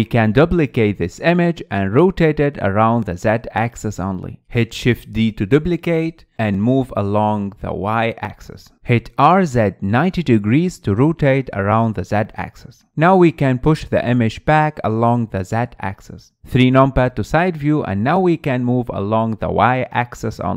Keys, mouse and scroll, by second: 3.2 click, 4.4 shift+d, 6.2-7.2 middle drag, 7.2 click, 11.2 r, 13.9-15.0 middle drag, 15.0 click, 16.6 KP_3, 17.4-19.6 scroll up 5, 19.6 click.